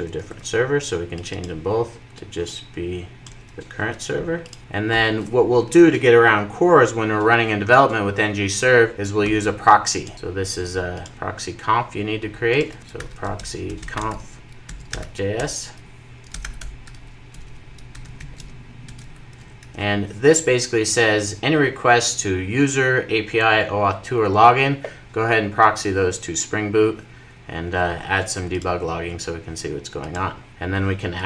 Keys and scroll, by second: 0.1 super+s, 18.9 Return, 19.4 super+s.